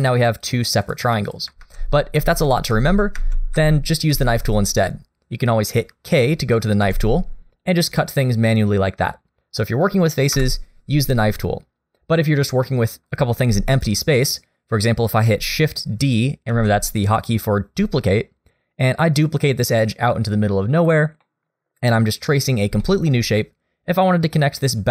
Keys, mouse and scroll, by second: 0.0 click, 0.4 click, 0.9 click, 1.3 click, 1.6 ctrl+z, 2.2 ctrl+z, 2.7 ctrl+z, 3.1 ctrl+z, 3.6 ctrl+z, 4.1 ctrl+z, 6.8 k, 12.1 click, 12.6 shift+middle click, 13.8 shift+click, 14.1 shift+middle click, 16.5 shift+d, 21.2 middle click, 22.8 shift+middle click.